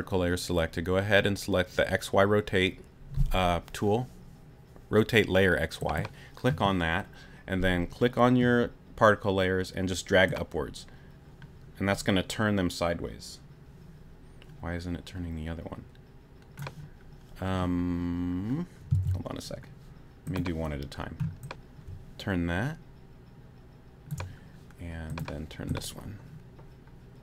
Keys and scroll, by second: 20.0 super+z.